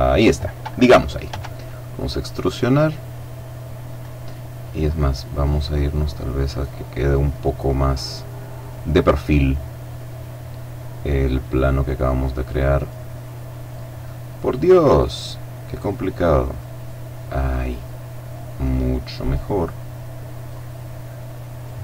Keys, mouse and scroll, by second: 1.1 e, 3.7 click, 5.6 middle click, 6.5 click, 7.2 click, 8.0 click, 8.3-12.9 middle drag, 9.1 click, 12.9 click, 13.3 middle click, 14.1 click, 14.4-16.1 middle drag, 16.1 click, 16.3 middle click, 17.7 click, 19.5 click, 20.5 click.